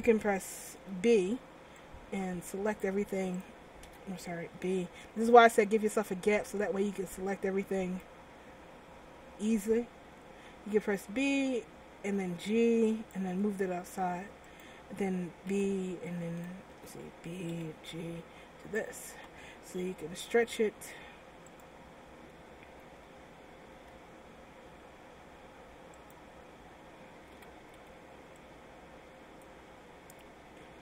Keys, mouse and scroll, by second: 0.7 b, 3.4 click, 4.0 a, 4.6 b, 11.1 g, 14.6 click, 15.6 b, 16.8 a, 17.6 b, 20.1 s, 23.9 g, 27.5 a, 27.9 b.